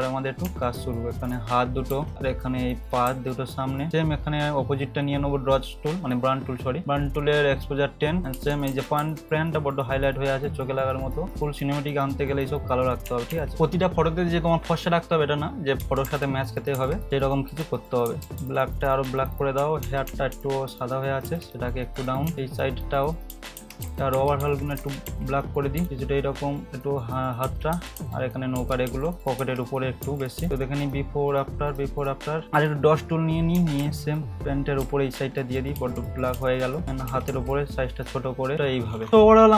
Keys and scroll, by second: 0.4 [, 1.9 ], 8.2 ], 8.3 ], 8.7 ], 9.0 ], 13.3 [, 16.0-18.3 typing, 19.6-21.2 typing, 22.3 [, 23.3-25.8 typing, 27.7-30.4 typing, 33.8 [, 34.8 [, 35.7 ], 36.3 ], 36.8 [, 38.5 ].